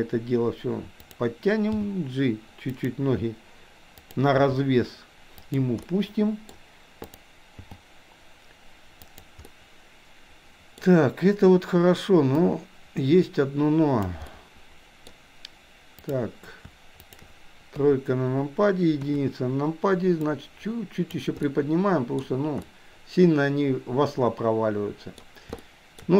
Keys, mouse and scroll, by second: 1.0 click, 1.8 g, 4.0 click, 4.4 g, 6.0 middle click, 7.0 click, 7.7 g, 9.5-10.9 middle drag, 12.4-14.2 drag, 14.3-14.9 scroll up 1, 14.9 middle click, 17.0 shift+click, 17.8 KP_3, 19.0 KP_1, 20.3-21.3 drag, 21.4-22.2 middle drag, 22.8-25.2 middle drag, 25.7-26.0 shift+scroll up 1.